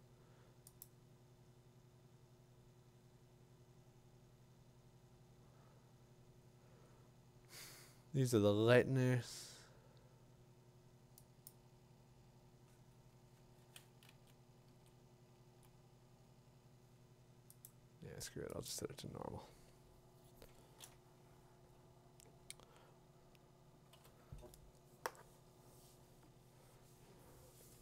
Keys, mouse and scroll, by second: 11.5 click, 17.7 Up, 17.7 click, 18.7 click, 20.6 scroll, 23.9 b.